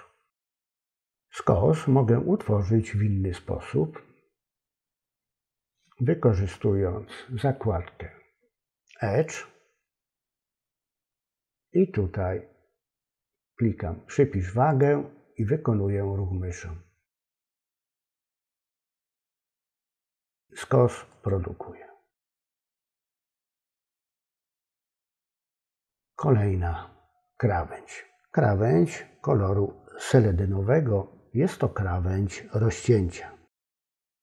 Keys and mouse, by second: 9.3-21.2 drag, 25.6 click.